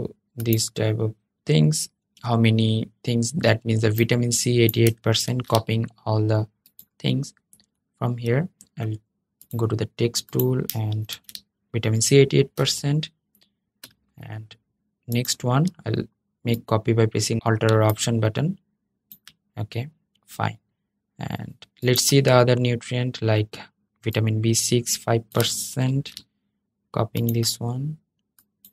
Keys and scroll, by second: 4.9 super+c, 10.8 super+v, 25.6 super+c.